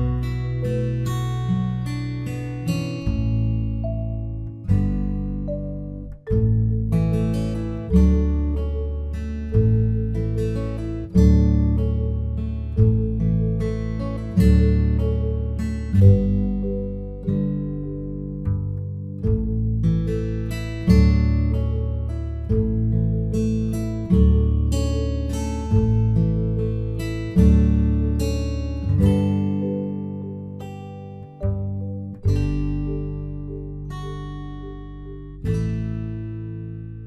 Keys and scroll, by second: 15.9 ctrl+t, 16.5 ctrl+t, 23.4 ctrl+0.